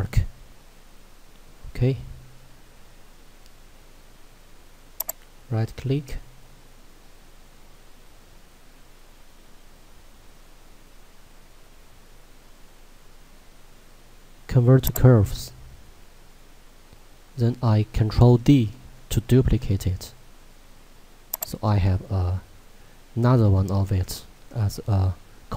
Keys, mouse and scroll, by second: 5.2 right click, 15.2 click, 18.8 d, 21.3 click, 23.8 z.